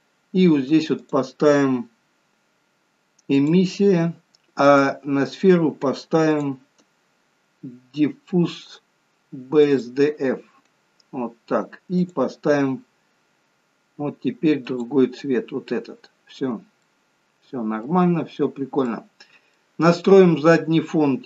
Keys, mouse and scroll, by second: 1.5 click, 4.8 click, 6.4 click, 11.2 scroll up 1, 13.1 click, 16.4 scroll up 3, 17.8 middle click, 18.2 scroll down 3, 18.9 middle click.